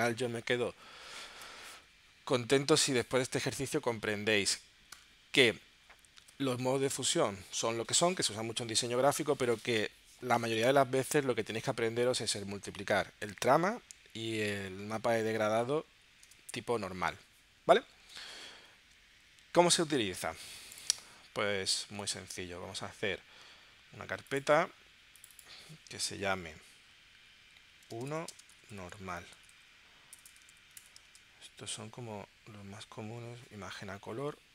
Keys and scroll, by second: 16.3 space, 18.1 space, 27.2-30.5 typing, 30.7 Return, 31.0 super+Tab.